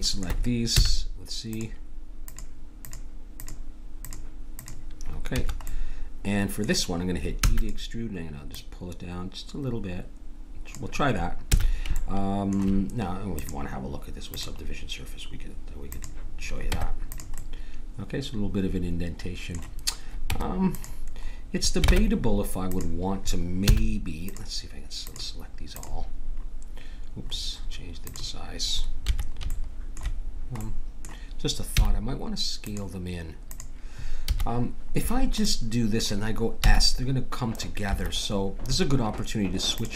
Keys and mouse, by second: 0.7 c, 5.7 middle click, 7.4 e, 8.5-10.4 drag, 11.5 a, 13.3-15.2 drag, 15.9 click, 16.7 Tab, 17.3 click, 17.5 middle click, 21.9 ctrl+Tab, 23.6 c, 29.5-31.8 middle drag, 31.8-34.4 drag, 31.8 c, 35.1 middle click, 36.6 s, 39.8-39.9 drag.